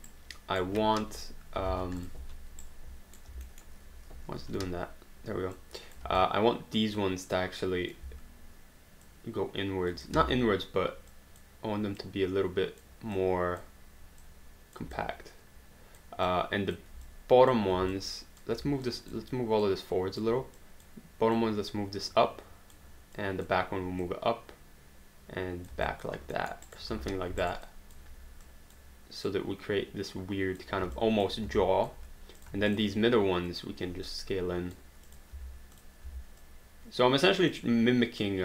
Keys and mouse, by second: 0.1 right click, 1.0 3, 1.7 alt+d, 2.0 click, 2.2 3, 2.6 right click, 3.5 alt+middle click, 4.5 q, 6.3 alt+click, 8.0 w, 9.0 click, 10.2 ctrl+z, 11.1 click, 13.2 click, 14.2 click, 14.9 alt+click, 16.3 alt+click, 17.9 alt+click, 23.2 click, 26.0 alt+click, 26.4 alt+middle click, 26.7 alt+right click, 27.0 space, 27.4 alt+right click, 27.6 alt+click, 31.0 alt+click, 31.9 alt+click, 32.7 shift+click, 34.1 click, 35.3 w, 35.8 click, 36.1 w, 36.4 click, 37.5 click.